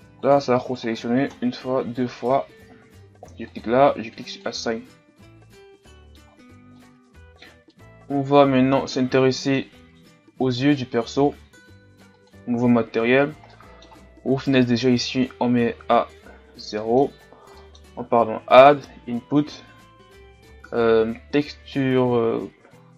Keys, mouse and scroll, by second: 0.3-1.3 right drag, 1.3 ctrl+KP_Add, 1.7 ctrl+KP_Add, 3.5-5.0 drag, 5.0-5.8 scroll down 3, 5.4 Tab, 5.8 middle click, 6.2-6.7 scroll up 1, 6.7 middle click, 7.4 scroll up 3, 7.6-9.7 middle drag, 9.7-10.7 scroll up 3, 10.7 right click, 12.6 click, 12.8-14.7 scroll down 5, 14.7-17.0 drag, 17.0-22.9 middle drag.